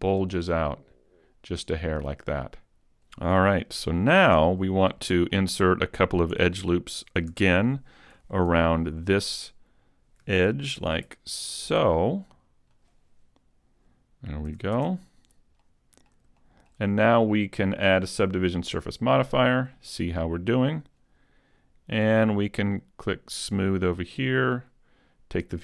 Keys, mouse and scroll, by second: 3.4 z, 3.8 middle click, 4.3 Tab, 5.0 shift+middle click, 5.7 middle click, 6.3 Tab, 6.7 middle click, 7.3 a, 8.5 ctrl+r, 10.0 click, 10.5 ctrl+r, 12.8 click, 14.5 a, 14.7 Tab, 15.3-15.7 scroll down 2, 15.7 middle click, 16.4 shift+middle click, 17.9 click, 20.3-21.1 scroll up 1, 23.5 click.